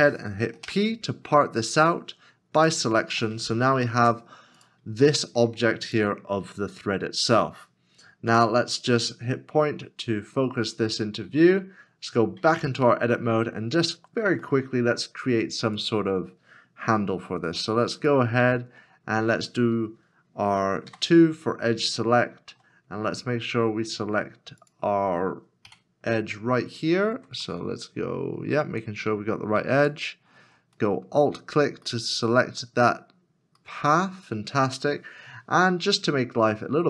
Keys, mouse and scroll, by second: 1.8 p, 4.0 Tab, 5.1 middle click, 8.3 KP_Decimal, 9.4 middle click, 11.4 scroll down 1, 12.5 Tab, 13.2 scroll up 1, 14.4 shift+middle click, 18.0 alt+l, 21.4 scroll up 1, 22.4 shift+middle click, 22.9 scroll up 1, 23.6 scroll up 1, 23.6-25.6 scroll down 1, 25.8 KP_Decimal, 27.6 middle click, 29.8 alt+click, 30.9 middle click, 31.0 scroll down 2, 32.1 scroll down 1, 32.3 middle click, 33.1 scroll down 1, 33.9 middle click, 34.1-34.6 scroll down 2, 36.7 scroll down 1.